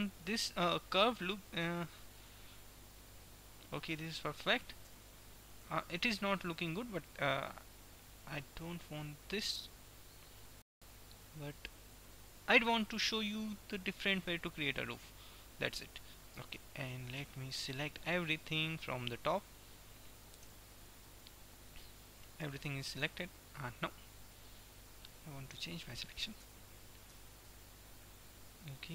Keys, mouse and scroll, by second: 5.0 Tab, 5.7 Tab, 6.5 middle click, 7.7 click, 11.0 KP_1, 12.7-14.4 middle drag, 14.4 KP_1, 15.9 Tab, 17.0 a, 18.7-20.5 drag, 20.5-22.0 middle drag, 20.5 b, 22.4-24.0 middle drag, 24.0 click, 24.2-25.4 middle drag, 25.4 KP_1, 26.5 a, 27.0 b.